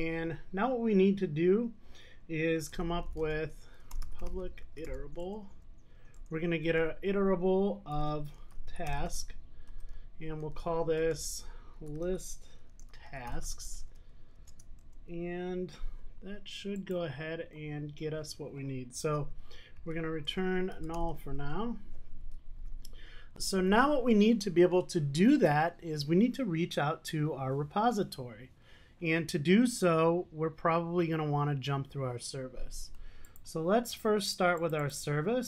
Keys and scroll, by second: 5.4 Return, 20.3 Return.